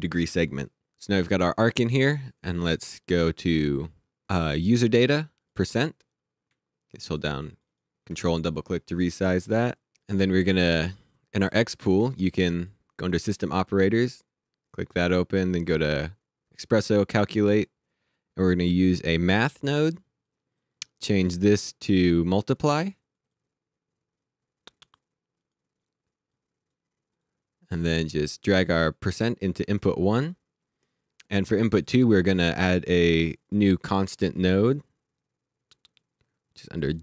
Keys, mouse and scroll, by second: 1.4 click, 5.4 click, 6.9 ctrl+click, 8.2 click, 11.4 click, 15.4 click, 18.9 click, 23.1 click, 24.8 click, 31.8 right click, 33.4 click, 36.8 click.